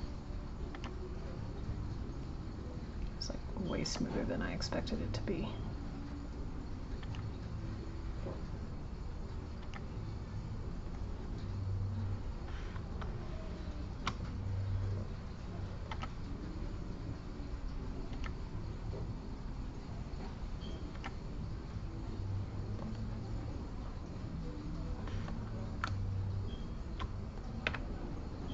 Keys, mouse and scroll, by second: 0.3 click, 3.1 click, 8.9 click, 12.2 click, 15.2 click, 15.9 g, 17.6 click, 23.7 click, 27.6 e.